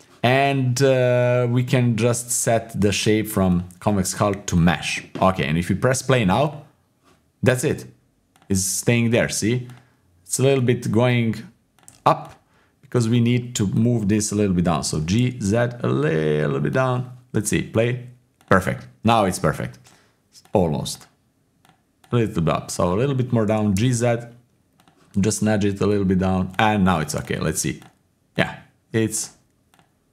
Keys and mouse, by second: 3.5-4.6 drag, 6.5-8.4 drag, 9.7-10.6 drag, 11.1-12.3 drag, 13.0 click, 13.8 click, 14.8 g, 17.7 click, 19.2 click, 20.4-22.1 drag, 22.7-23.5 drag, 23.5 g, 25.9 click, 26.5 click, 27.2 click, 27.8 click, 28.3-30.1 drag.